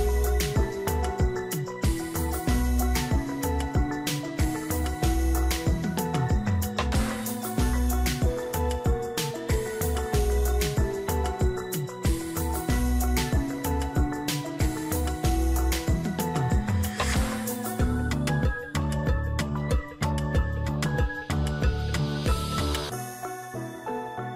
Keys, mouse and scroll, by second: 2.6 ctrl+j, 3.6 ctrl+click, 5.1 ctrl+t, 6.1 alt+click, 7.2 alt+click, 10.4 shift+click, 22.0 double click.